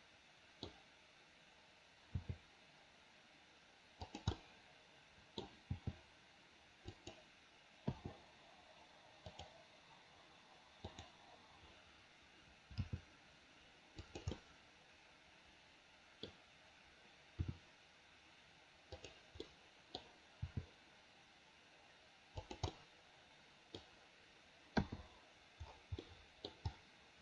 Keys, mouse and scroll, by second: 4.4-5.5 middle drag, 5.7 g, 8.0 i, 9.4 click, 11.0 click, 12.8 g, 14.4-16.2 middle drag, 17.5 r, 19.5 middle click, 20.4 g, 22.7-23.8 middle drag, 24.9 i, 26.1 middle click.